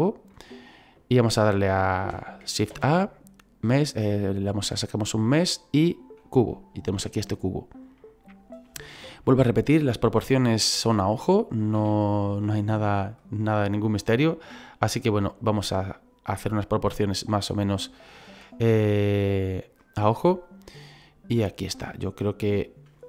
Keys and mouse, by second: 6.2 click, 8.0 middle click, 8.9 shift+middle click, 11.2 click, 13.1 click, 15.4 click, 17.0 click, 18.1 middle click, 18.9 click, 20.5 click, 21.9 middle click.